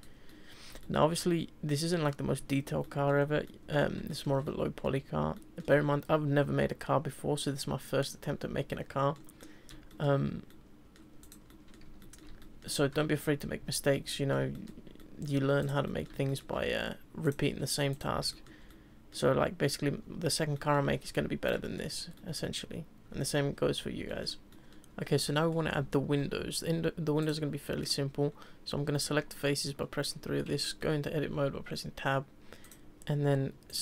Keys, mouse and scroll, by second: 0.1-0.4 scroll down 2, 0.4-1.1 middle drag, 1.1 scroll up 1, 1.2-4.4 middle drag, 4.4 scroll up 1, 4.4-8.5 middle drag, 8.7-11.2 middle drag, 11.2 click, 11.5-11.8 middle drag, 11.8 Tab, 12.0-15.6 middle drag, 15.6 click, 15.8-17.2 middle drag, 17.2 click, 17.9 click, 18.3-20.9 shift+middle drag, 20.9 Tab, 21.6-22.4 shift+middle drag, 22.4-24.1 scroll down 2, 24.1-24.9 shift+middle drag, 25.3-26.6 middle drag, 26.6 Tab, 27.2 click, 27.6 middle click, 28.3-29.5 scroll up 1, 30.6-32.6 shift+middle drag, 32.6 click, 33.7 shift+click.